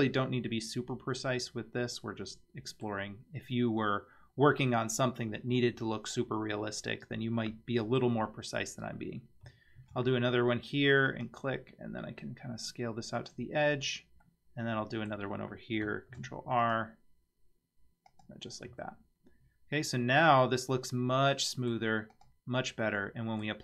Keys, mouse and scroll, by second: 3.7-6.8 scroll up 2, 9.8 ctrl+r, 13.7-14.3 scroll down 2, 14.3 middle click, 16.1 ctrl+r, 18.7 Tab, 19.4 scroll down 2, 19.8-21.7 middle drag, 22.1 click, 22.8-23.5 middle drag.